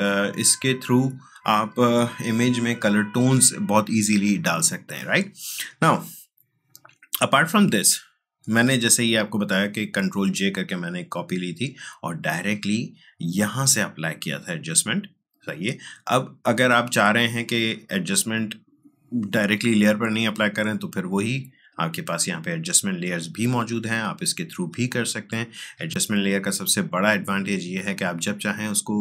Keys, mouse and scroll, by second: 6.8 click, 13.3 click, 18.2 click, 21.4 click.